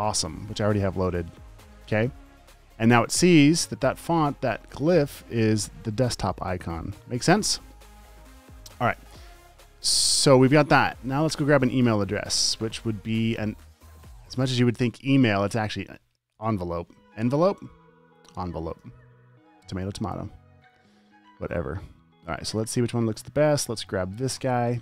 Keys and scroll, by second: 0.0-0.4 typing, 15.6-17.2 typing, 18.8-19.6 typing.